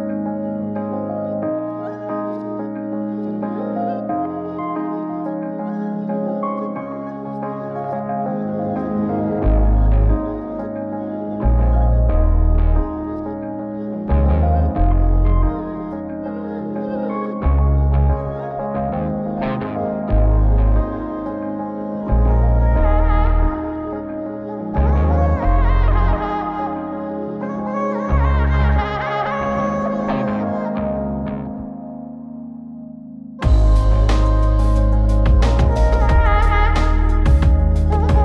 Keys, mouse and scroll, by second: 0.0 click, 0.6 click, 1.8 click, 2.8 click, 5.7 click, 6.2 click, 7.4-10.0 scroll down 5, 10.0 click, 10.4 scroll down 2, 11.6 click, 11.8-16.4 drag, 16.4-17.3 scroll down 2, 17.4-19.6 drag, 20.2 scroll down 1, 20.4 click, 21.3 click, 23.2 shift+a, 25.8 scroll up 2, 28.4-33.7 drag, 33.8 scroll down 2, 34.2 middle click, 34.7 shift+a.